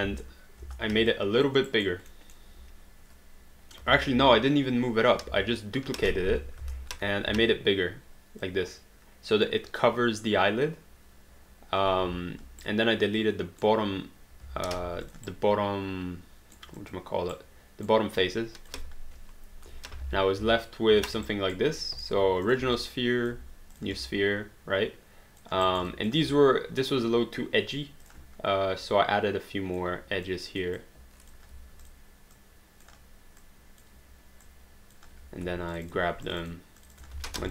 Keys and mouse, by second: 0.0 space, 1.4 alt+click, 1.7 alt+right click, 2.1 alt+middle click, 5.3 ctrl+shift+z, 6.3 ctrl+y, 6.6 space, 8.5 click, 12.6 right click, 14.7 alt+d, 15.1 click, 15.3 right click, 16.8 click, 17.3 right click, 18.2 click, 19.2 Delete, 20.4 space, 21.3 alt+right click, 21.8 alt+middle click, 22.4 click, 22.7 alt+click, 24.1 alt+click, 25.8 alt+right click, 25.9 alt+click, 28.0 click, 30.3 click, 31.8 click, 33.4 click, 34.5 click, 35.1 q, 35.7 shift+click, 37.2 r.